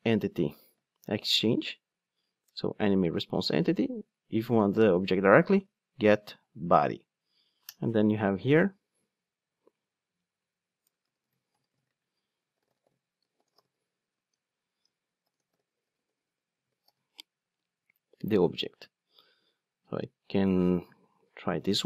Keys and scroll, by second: 2.4 Return, 7.7 Return, 20.8 super+c.